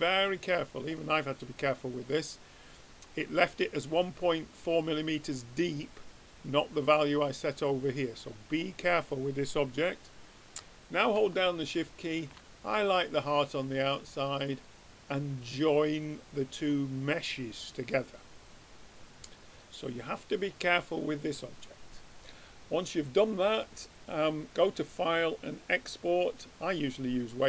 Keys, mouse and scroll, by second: 0.1-6.0 middle drag, 7.8-11.2 middle drag, 12.0-15.1 drag, 16.9-19.4 middle drag, 24.2-26.2 drag.